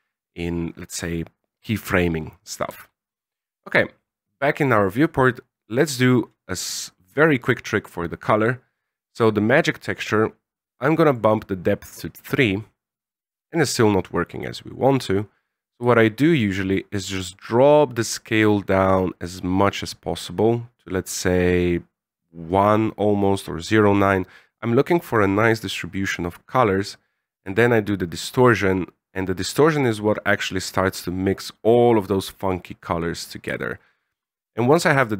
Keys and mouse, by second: 2.9 z, 4.1 click, 9.0 click, 11.0 click, 15.7-23.6 shift+drag, 27.5-32.8 shift+drag, 33.4-35.1 shift+drag.